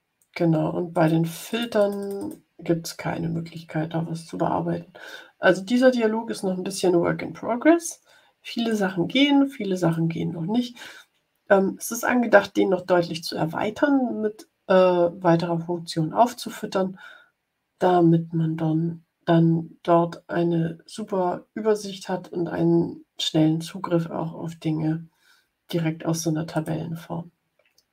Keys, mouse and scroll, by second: 0.8 click, 1.4 click, 8.6-10.0 drag, 26.4 click.